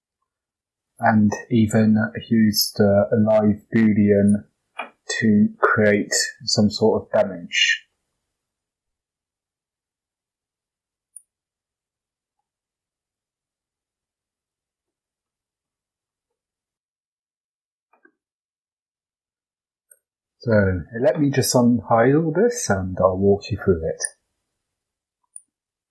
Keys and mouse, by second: 0.1 drag, 0.8 click, 2.1 g, 4.9 h, 5.4-6.1 middle drag, 7.2 ctrl+z, 7.8 middle drag, 8.4 click, 9.5 g, 11.8 h, 12.3-14.0 middle drag, 14.3 click, 15.2-15.6 middle drag, 15.2 h, 16.2-17.2 middle drag, 19.9 alt+h, 22.8 x, 24.7 click, 24.9 x, 25.8 x.